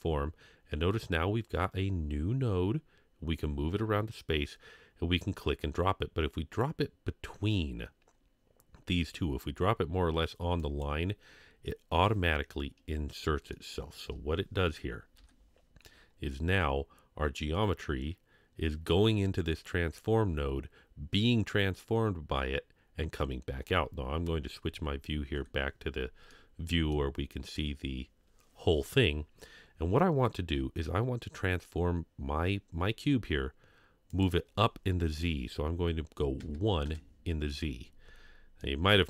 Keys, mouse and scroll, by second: 13.7 shift+middle click, 13.7 scroll down 2, 15.1 Home, 18.8-19.6 scroll up 1, 26.3-27.0 middle drag, 27.2 scroll up 2, 34.1-36.9 drag, 38.6-38.9 middle drag.